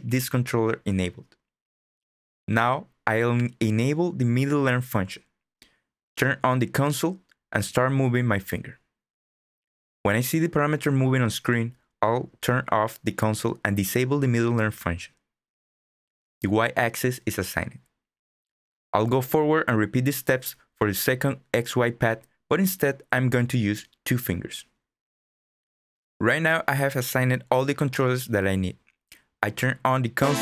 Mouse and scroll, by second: 17.4 click.